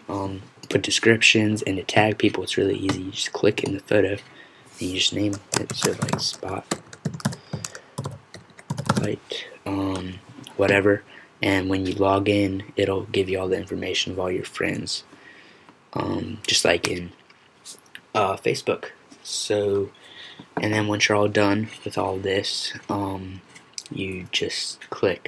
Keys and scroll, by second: 5.6-9.6 typing.